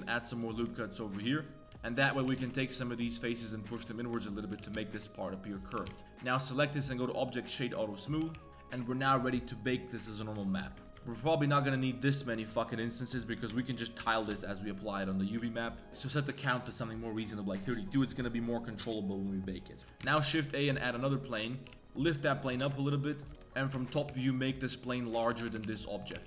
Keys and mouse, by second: 0.1 3, 0.4 click, 1.0 ctrl+shift+click, 1.6 ctrl+z, 1.9 ctrl+click, 2.2 g, 4.0 click, 4.4 shift+click, 4.6 g, 5.6 click, 5.7 g, 6.3-8.0 drag, 8.0 middle click, 8.2 a, 8.3 a, 10.1 middle click, 10.4 shift+middle click, 10.8 shift+middle click, 11.0 shift+middle click, 11.2 middle click, 11.9-14.2 drag, 15.0 middle drag, 15.4 shift+middle drag, 15.9 2, 19.8 shift+s, 20.1 shift+a, 20.8 drag, 21.2 middle click, 21.6 g, 22.5 KP_7, 23.6 Tab, 23.7 shift+middle drag, 24.1 s, 25.1 z, 25.3 g, 26.0 Tab, 26.1 g.